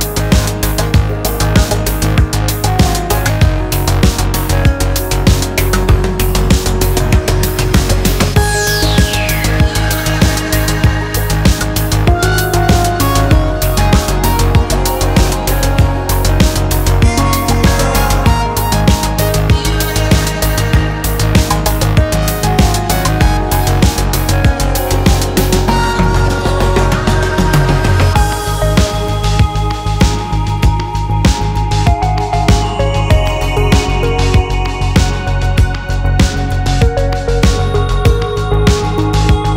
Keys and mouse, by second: 0.5 Tab, 0.8 click, 1.0 Tab, 1.3 2, 1.9 shift+click, 2.6 shift+click, 3.4 shift+click, 3.7 click, 4.4 ctrl+r, 10.0 3, 11.8 click, 12.5 alt+e, 14.8 click, 15.7 middle click, 17.1 shift+click, 18.2 2, 19.2 ctrl+r, 20.3 shift+click, 21.6 g, 23.4 ctrl+b, 25.9 alt+e, 31.3 2, 31.4 click, 32.1 ctrl+r, 34.8 ctrl+b, 37.7 2, 38.2 alt+click.